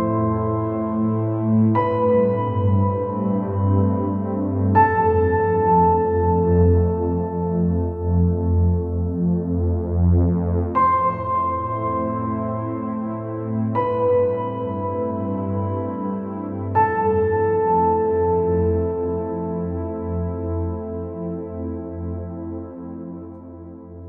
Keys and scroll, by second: 2.1 space, 2.4 space, 17.4-17.9 space.